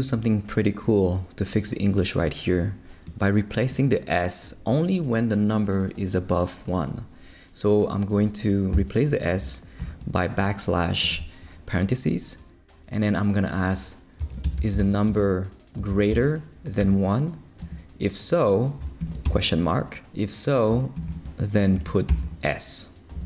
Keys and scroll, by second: 8.7 \, 9.4 shift+\, 9.8 shift+9, 14.0-17.6 typing, 19.0 shift+/, 19.2 shift+space, 21.0 shift+', 21.8 shift+Left, 22.1 s, 22.2 Right, 23.1 space.